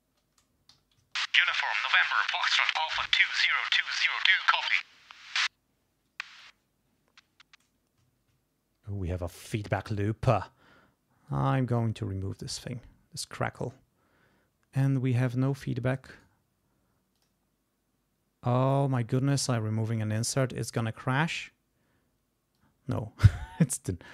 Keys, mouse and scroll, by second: 0.7 g, 1.5 ctrl+scroll down 2, 6.2 space, 8.1 ctrl+scroll down 2, 9.7 click, 10.3 right click, 11.3 click, 12.3 click, 13.5 click, 15.2-16.3 drag, 16.1 right click, 17.2 click, 22.5 click, 23.5 click.